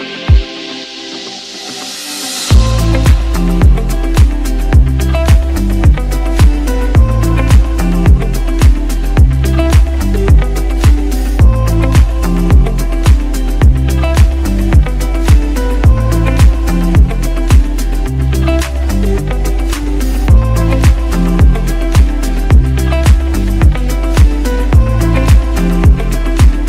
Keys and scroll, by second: 2.4 ctrl+alt+shift+a, 4.0 ctrl+d, 4.9 ctrl+j, 7.1 ctrl+alt+g, 7.2 ctrl+t, 19.6-22.5 typing, 25.3-26.4 typing.